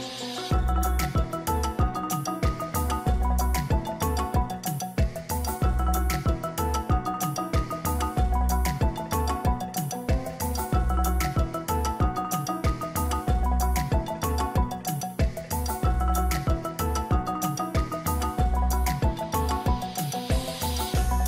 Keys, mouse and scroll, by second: 0.2-2.3 scroll up 1, 2.3-3.2 scroll up 1, 3.5-5.9 scroll up 3, 5.9-6.7 scroll down 1, 6.7 scroll down 1, 7.6-8.9 scroll up 1, 8.9-11.7 scroll up 1, 14.4 ctrl+=.